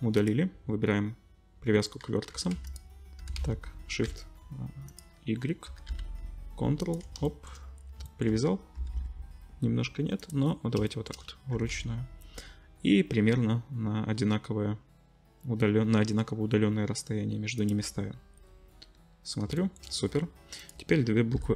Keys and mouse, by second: 2.3 g, 3.2 g, 5.7 g, 7.5-20.6 drag, 8.8 g, 11.5 g, 20.6 middle click, 20.7-21.5 drag, 21.3 l.